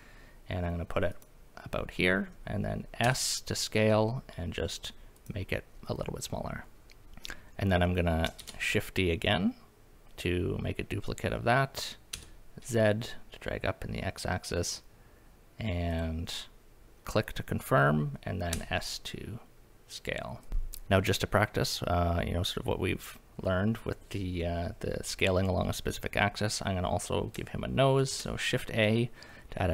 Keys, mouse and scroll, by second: 1.1 click, 3.0 s, 5.2 click, 8.4 shift+d, 12.1 z, 15.9 click, 18.5 s, 20.4 click, 20.5 middle click, 20.5-21.0 scroll up 1, 20.5 KP_1, 28.1 shift+a.